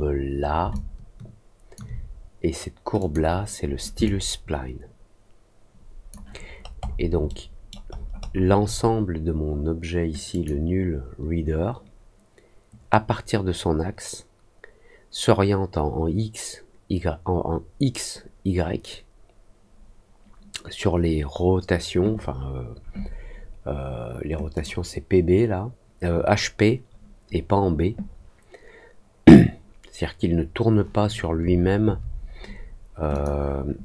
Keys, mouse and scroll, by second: 0.7-1.7 alt+drag, 2.9 click, 4.0-6.0 alt+drag, 6.4 alt+middle click, 6.7 alt+middle click, 7.2 alt+middle click, 7.8 alt+middle click, 8.1 alt+middle click, 10.2 click, 24.5 click, 33.1 click.